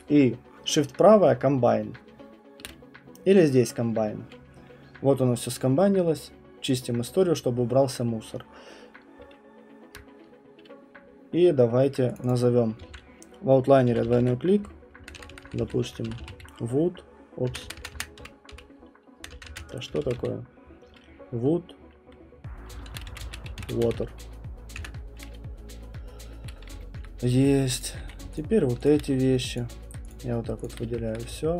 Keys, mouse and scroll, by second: 2.6 right click, 3.1 middle click, 6.7 click, 12.1 click, 12.3 click, 12.8-14.6 typing, 17.2 BackSpace, 17.5 BackSpace, 17.6 BackSpace, 19.8-20.6 typing, 22.6-24.3 typing, 24.7 Return, 26.7 typing, 27.0 alt+middle click, 27.8 click, 28.0 q, 28.3 shift+click, 28.8 shift+click, 29.5 shift+click, 30.1 shift+click, 30.6 shift+click, 31.1 alt+middle click.